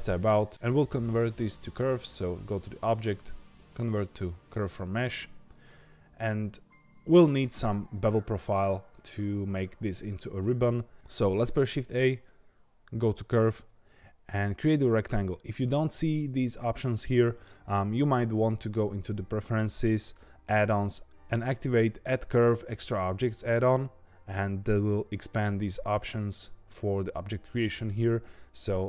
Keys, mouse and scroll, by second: 1.6-4.6 drag, 10.9-11.5 scroll down 1, 11.5 shift+a.